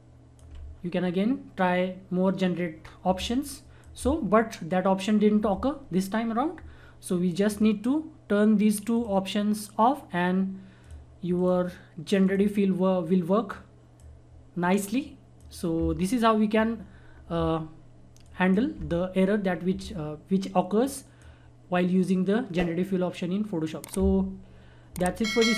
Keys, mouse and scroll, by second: 3.1-6.1 drag, 7.4-18.2 drag, 20.8-23.7 drag.